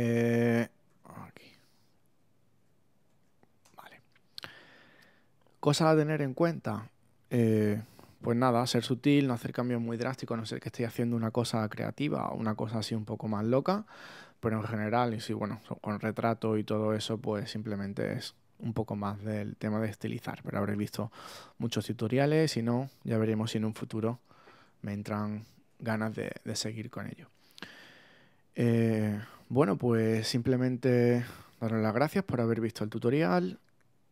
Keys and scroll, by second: 0.9 alt+super+d, 1.8 alt+super+z, 3.0 alt+super+d, 3.6 super+space, 9.9 super+-, 13.8 super+-, 25.0 super++, 25.9 super+space, 26.8 space.